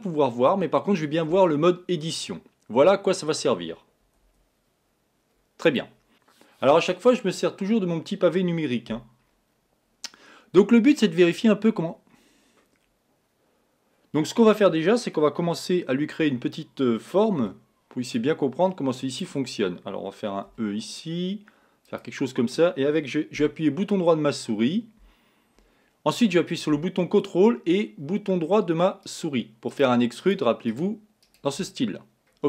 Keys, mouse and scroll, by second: 5.7 click, 16.2 a, 17.7 b, 20.5 e, 24.1 scroll down 1, 29.0 right click, 29.7 right click, 30.2 right click, 30.7 right click, 31.2 right click, 32.1-32.4 scroll down 1.